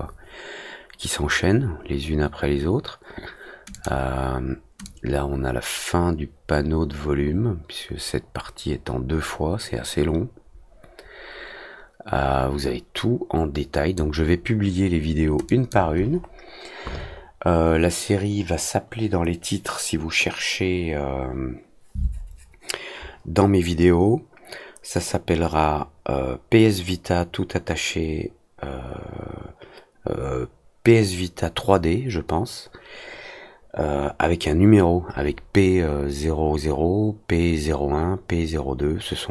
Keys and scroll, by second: 10.9 ctrl+Return, 11.2 &, 11.4 alt+c, 12.2 F4.